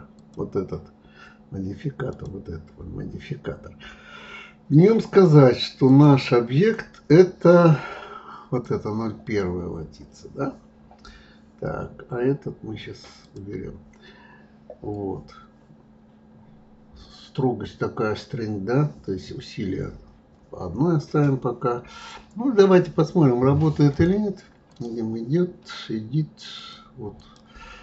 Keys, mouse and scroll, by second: 0.1-3.2 drag, 5.9 click, 13.1 click, 23.9-26.7 drag, 27.1 click.